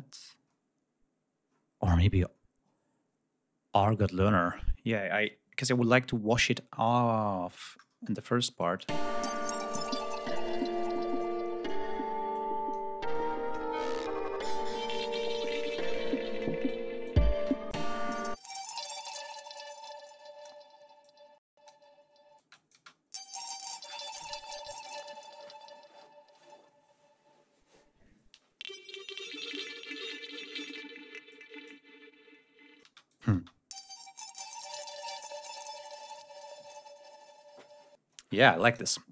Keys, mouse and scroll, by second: 1.4-2.3 scroll up 2, 3.6 click, 6.3 click, 7.4 ctrl+scroll up 2, 8.5 click, 8.8 space, 11.1-11.8 drag, 12.2-12.8 drag, 13.0-13.6 drag, 14.9-15.5 drag, 16.6 click, 17.2 space, 17.4 click, 18.2 click, 19.9-20.5 drag, 20.9-21.7 drag, 22.2 space, 22.3-22.7 drag, 31.1-31.7 drag, 32.6 space, 32.9-33.3 drag, 37.8 space, 38.4 click.